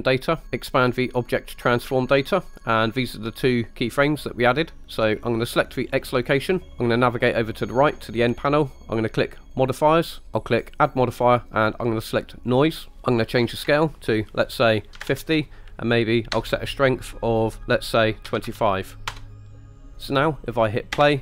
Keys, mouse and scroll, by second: 0.4 click, 1.7 click, 2.9 click, 3.5 click, 4.0 click, 9.6 click, 10.2 click, 10.8-12.7 drag, 13.1-19.2 drag, 19.9 click, 19.9 space, 21.0 space.